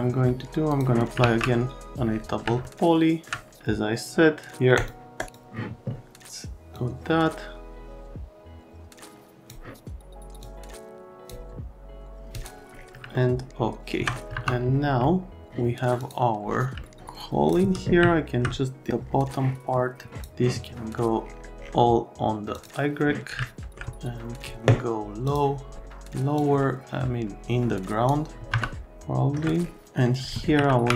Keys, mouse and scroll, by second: 0.7 click, 1.2 alt+1, 2.6 middle click, 4.8 click, 5.2 right click, 5.3 click, 6.8 click, 10.4 click, 12.4 click, 13.1 alt+middle click, 14.3 F3, 15.0 alt+middle click, 16.0 click, 16.8 alt+middle click, 17.0 shift+click, 18.0 alt+middle click, 20.1 middle click, 22.5 middle click, 23.4 alt+right click, 25.2 middle click, 26.4 click, 28.5 F3, 28.8 alt+middle click, 30.7 alt+1.